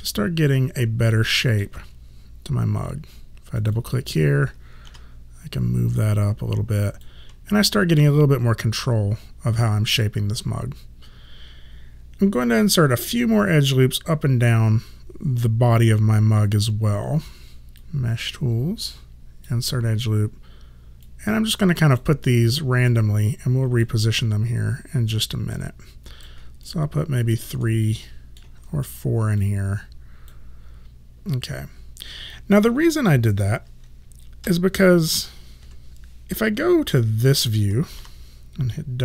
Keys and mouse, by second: 1.1 alt+middle click, 3.6 click, 4.9 w, 6.0 click, 17.8 click, 21.1 click, 25.6 click, 26.7 alt+click, 27.7 alt+middle click, 29.5 click, 34.5 4, 35.7 5, 38.0 w.